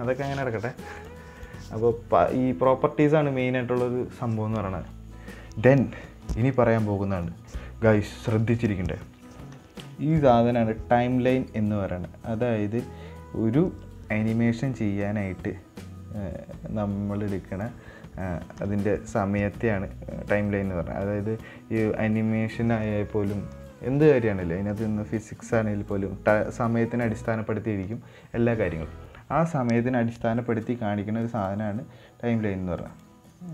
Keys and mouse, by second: 1.3 click, 15.4-18.2 drag, 20.8-21.8 drag, 25.5-26.3 drag, 31.7 click, 33.3 click.